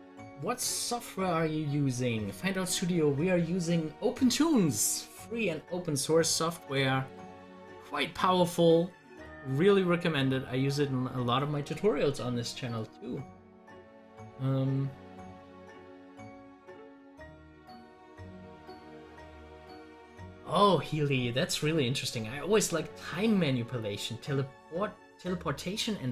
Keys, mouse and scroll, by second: 6.2 scroll up 1, 9.4 scroll up 1, 10.5 scroll up 1, 10.9 scroll down 1.